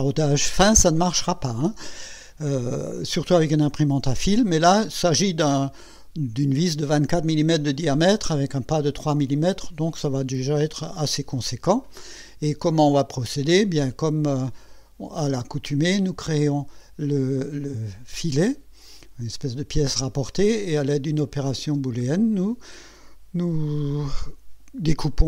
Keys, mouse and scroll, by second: 14.7 click, 15.2 space, 21.6 space.